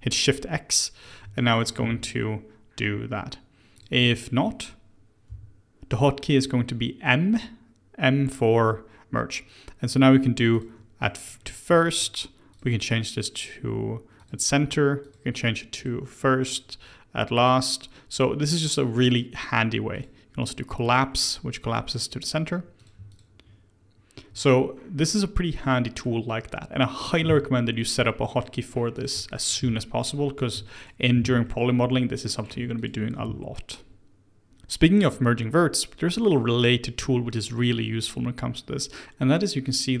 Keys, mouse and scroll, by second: 1.0 click, 1.4 shift+click, 1.8 shift+x, 3.7 click, 4.1 shift+click, 5.2 m, 11.0-12.5 middle drag, 12.5-20.8 drag, 20.8-22.7 middle drag, 22.7 click, 23.0 shift+click, 25.7 middle click, 26.3-27.2 scroll up 1, 27.2 shift+x, 27.9-28.9 middle drag, 28.9 click, 29.2 shift+click, 29.6 shift+x, 30.3 click, 30.7 shift+click, 31.1 shift+x, 31.4 middle click, 32.3 click, 32.7 shift+click, 33.2 shift+x, 34.2 scroll, 34.5 scroll down 1, 39.9-40.0 middle drag.